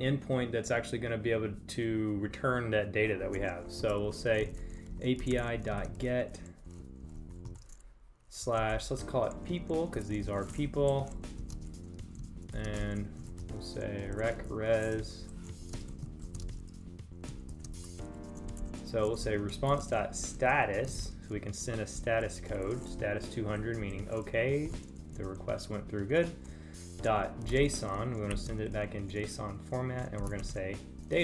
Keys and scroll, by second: 10.4 Right, 11.0 space, 14.8 Right, 15.9 space, 23.3 Right, 31.1 super+Right.